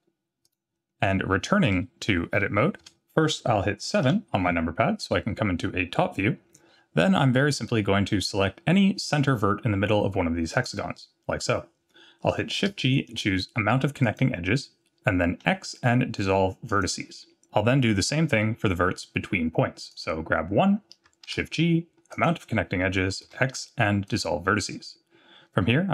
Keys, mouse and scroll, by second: 2.8 Tab, 4.0 KP_7, 7.4 scroll up 1, 10.5 click, 12.6 shift+g, 15.4 x, 19.9 click, 21.2 shift+g, 23.2 x, 24.8-25.2 scroll down 1.